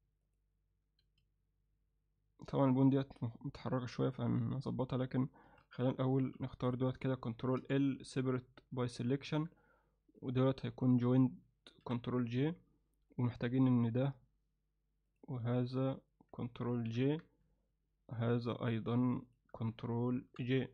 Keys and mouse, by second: 0.3 click, 1.1 a, 5.5 alt+a, 6.2 b, 7.6 ctrl+l, 8.0 p, 9.3 Tab, 10.2 click, 10.8 shift+click, 11.9 ctrl+j, 13.1 click, 15.1 click, 15.8 shift+click, 16.9 ctrl+j, 18.2 click, 18.7 shift+click, 19.3 shift+click, 20.3 ctrl+j.